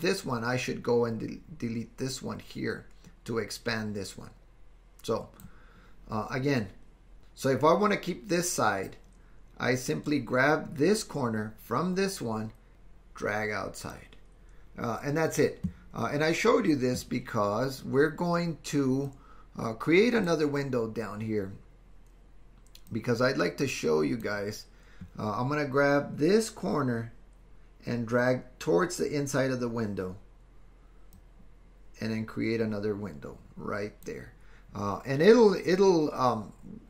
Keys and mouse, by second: 12.7 super+z, 12.7-14.0 drag, 19.2-20.3 drag, 22.9-24.4 drag, 31.1-34.1 drag.